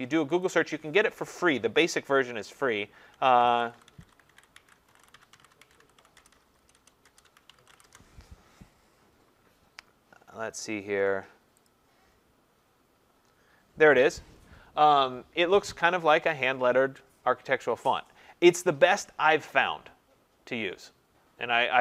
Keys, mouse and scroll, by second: 0.5 click, 2.9-8.2 typing, 4.7 click, 11.7-18.4 drag, 12.7 typing.